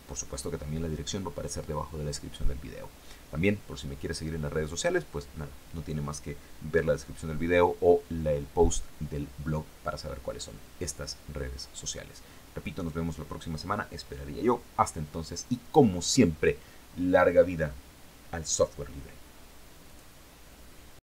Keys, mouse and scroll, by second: 19.3 click, 20.8 click.